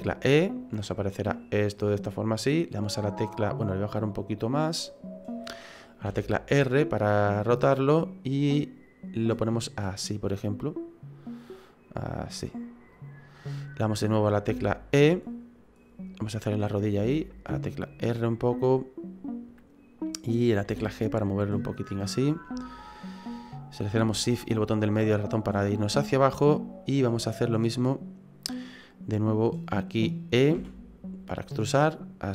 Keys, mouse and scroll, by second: 4.2 click, 6.1 r, 9.3 click, 12.9 click, 14.5 e, 17.0 r, 20.7 g, 24.4 shift+middle click, 30.5 e.